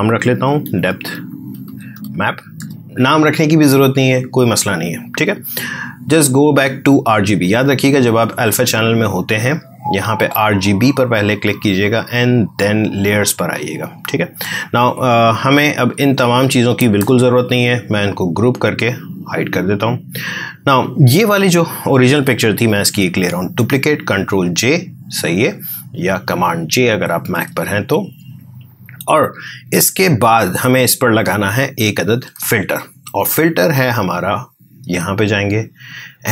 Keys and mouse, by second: 0.3-2.7 typing, 5.9 click, 11.0 click, 15.4 click, 17.3 ctrl+g, 18.7 click, 22.7 ctrl+j, 27.2 space, 29.4-34.0 ctrl+drag.